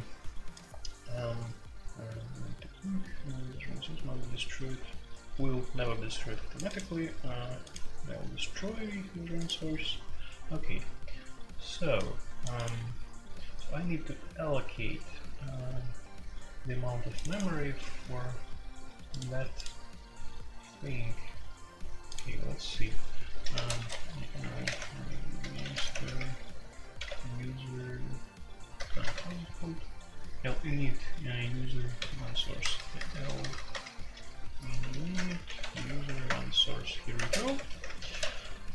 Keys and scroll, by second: 23.3-27.3 typing, 28.7 typing, 29.1 super+k, 32.0 super+k, 32.6-36.0 typing, 36.2 Return, 37.1-38.2 typing.